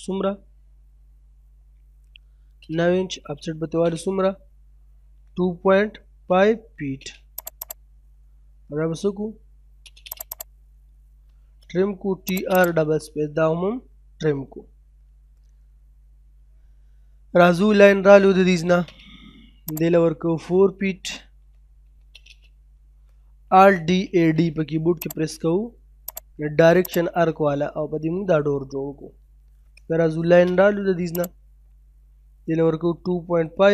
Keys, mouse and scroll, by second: 2.1 space, 3.2 o, 3.4 space, 4.7 typing, 6.5 space, 7.4 click, 9.4 space, 10.1 click, 11.6-12.0 typing, 12.3 click, 12.9-13.3 scroll down 1, 13.3 middle click, 14.7-15.1 scroll down 1, 15.1 middle click, 15.5-16.0 scroll up 1, 16.5-16.8 scroll down 1, 16.8 middle click, 17.2-18.2 scroll up 1, 18.2 l, 18.4 space, 18.5-19.6 scroll up 1, 19.7 click, 21.0-21.7 typing, 22.2 middle click, 23.9 typing, 24.5-24.9 scroll down 1, 25.0 click, 27.4 middle click, 27.6 middle click, 28.3 scroll down 1, 29.8 l, 30.0 space, 30.0 scroll up 1, 31.2 click, 32.5 typing.